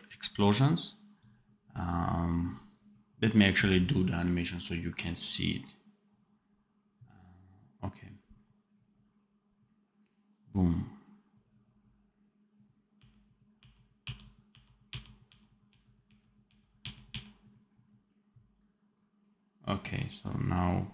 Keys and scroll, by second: 3.4 d, 12.9 r, 13.5 r, 15.2 r, 16.0 r, 17.0 r.